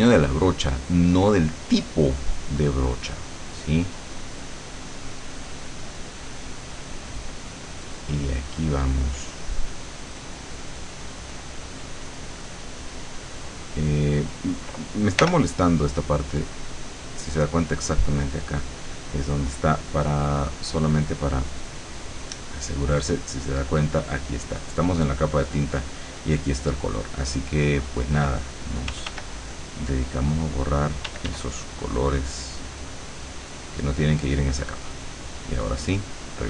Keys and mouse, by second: 4.3-9.9 drag, 11.7 middle click, 12.6 middle click, 13.5 middle click, 15.3 l, 16.6 click, 20.5 click, 21.3 click, 27.4 click, 29.0 f, 29.4 click, 30.0-31.2 drag, 31.2 d, 31.7-34.6 drag, 35.9 click, 36.3 click.